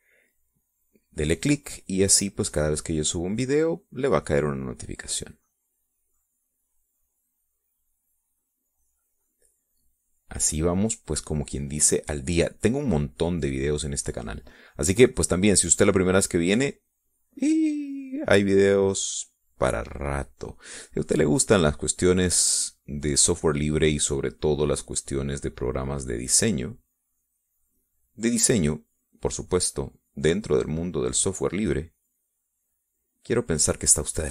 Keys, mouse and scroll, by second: 3.0-5.6 drag, 6.3-11.1 drag, 11.3-21.7 drag, 21.8 click, 23.1-27.1 drag, 27.3-29.6 drag, 30.5-33.1 drag.